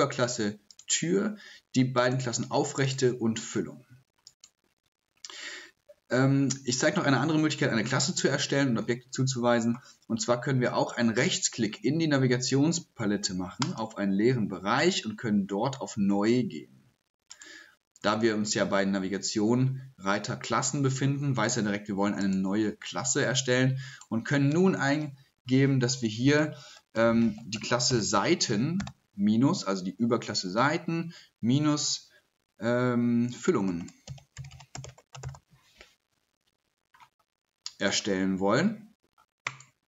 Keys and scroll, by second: 26.1-28.8 typing, 31.6 typing, 33.4-35.7 typing.